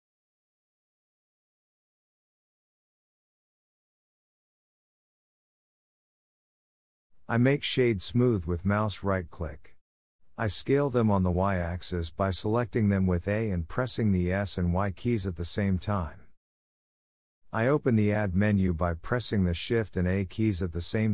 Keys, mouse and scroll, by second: 0.0-1.1 scroll up 2, 0.4 shift+middle click, 1.1 shift+middle click, 1.3-1.7 scroll up 1, 1.7 middle click, 2.1 2, 2.4 alt+click, 2.9 shift+middle click, 3.3-3.7 scroll down 5, 3.7 g, 5.6 Tab, 5.8 click, 6.2 scroll down 1, 6.3-6.9 middle drag, 6.9 click, 7.3-9.2 right drag, 9.2 click, 10.1 click, 10.5 click, 11.1 shift+middle drag, 11.3-11.6 scroll down 2, 11.6 click, 12.1 g, 13.0 shift+middle click, 13.3 scroll down 1, 13.5 Tab, 14.1 a, 14.4 s, 17.5 Tab, 17.5 click, 18.0-18.4 scroll up 1, 18.4 shift+middle drag, 18.6-19.4 scroll down 3, 19.4 click, 20.5 shift+middle click, 20.7 shift+a.